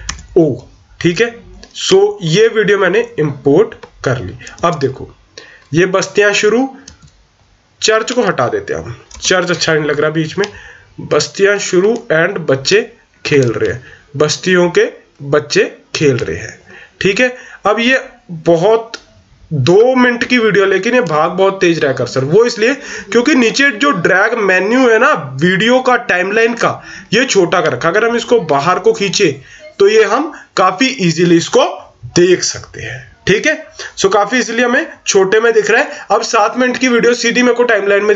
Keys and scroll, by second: 4.5 o, 9.1 BackSpace.